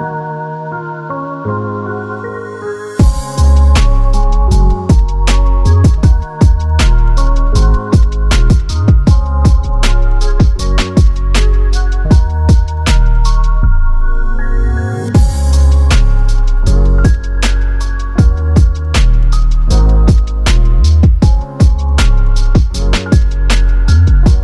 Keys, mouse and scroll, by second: 19.4 click.